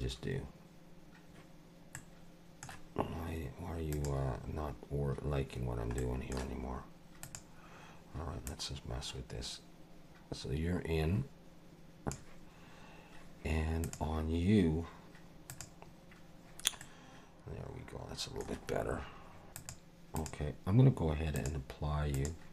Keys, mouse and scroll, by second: 1.9 middle click, 3.9 click, 6.0 middle click, 7.2 click, 8.5 click, 13.8 click, 15.5 click, 16.8 middle click, 19.5 click, 19.6 click, 20.2 click, 21.3 click, 22.1 click.